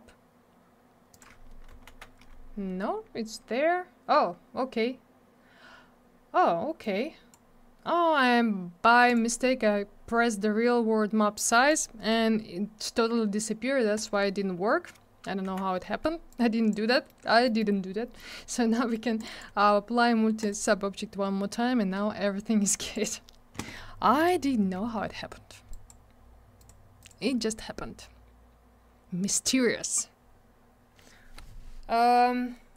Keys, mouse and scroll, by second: 1.1 click, 1.2 click, 1.7 ctrl+z, 6.8 click, 9.1 click, 9.1 click, 11.4 click, 13.9 click, 14.0 click, 15.4 m, 16.3 click, 16.9 middle click, 17.0 middle click, 17.2 scroll down 1, 17.4 middle click, 17.6 middle click, 17.7 scroll up 1, 18.2 middle click, 18.3 middle click, 18.7 middle click, 18.9 middle click, 19.2 click, 19.2 click, 19.3 click, 19.4 double click, 20.4 click, 20.5 click, 22.9 click, 23.0 click, 24.2 click, 24.2 click, 25.7 click, 25.9 click, 26.6 click, 26.6 click, 27.0 click, 27.1 double click.